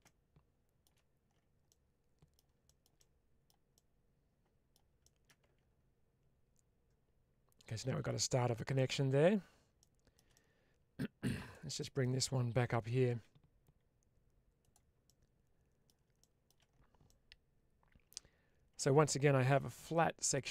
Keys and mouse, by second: 1.5 middle click, 2.5 shift+middle click, 2.8 shift+middle click, 3.6 middle click, 4.9 shift+middle click, 8.9 Tab, 9.6 shift+middle click, 10.2 middle click, 11.3 click, 11.6 middle click, 12.8 g, 14.9 middle click, 16.1 shift+middle click, 16.9-18.0 middle drag, 19.4 2.